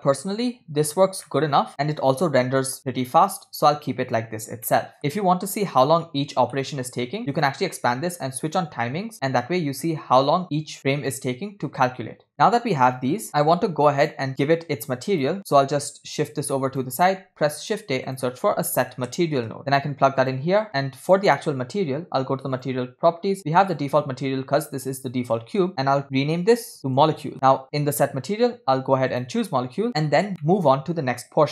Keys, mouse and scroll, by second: 1.3-1.9 middle drag, 4.7 middle click, 6.2-6.6 scroll down 2, 6.6 middle click, 7.4-9.1 drag, 9.3 middle click, 9.8-10.5 scroll up 2, 10.5-11.5 scroll up 2, 12.3 middle click, 12.8 scroll down 2, 13.6-14.2 drag, 14.3-15.4 drag, 15.5-16.9 drag, 17.3 shift+a, 20.7 click, 22.7 click, 23.7-27.3 drag, 27.3 scroll up 3, 28.1 scroll up 2, 28.1-29.7 drag, 30.1-31.5 scroll down 7, 30.4 middle click.